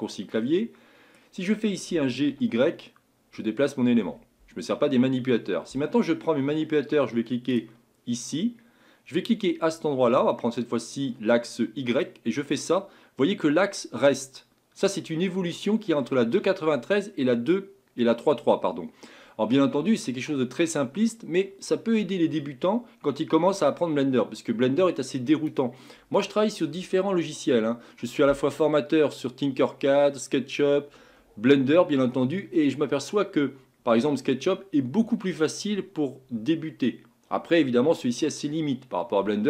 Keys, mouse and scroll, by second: 1.9 g, 7.5-10.7 drag, 12.0 click.